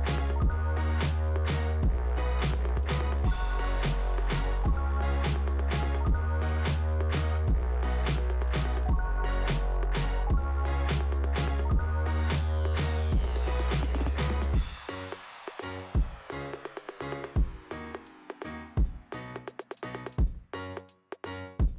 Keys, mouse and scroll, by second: 0.0 scroll up 1, 1.0 right click, 2.0 click, 3.8 click, 4.7 scroll up 2, 8.4 click, 9.8 click, 10.1 right click, 11.0 click, 12.8 click, 14.3 click, 15.2-15.6 scroll down 3, 15.5 click, 16.6 middle click, 17.5 scroll up 2, 18.5 click, 19.5 click.